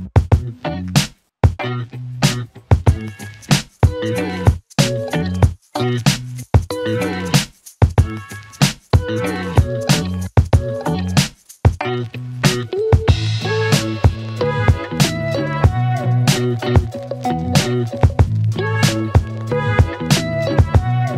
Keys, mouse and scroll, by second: 12.6 click.